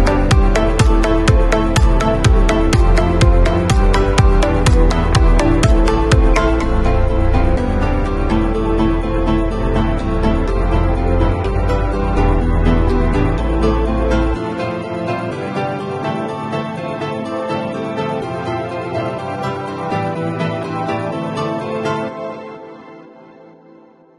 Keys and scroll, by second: 1.0 0, 3.0 x, 4.8 v, 12.7 super+[, 14.9 super+], 19.5 shift+super+g, 23.3 b.